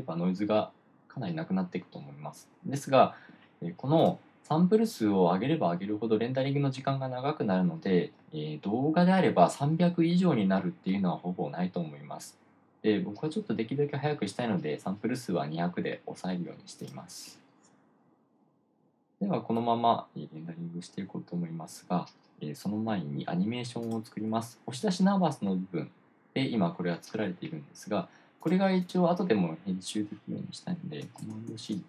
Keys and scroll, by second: 31.6 super+c.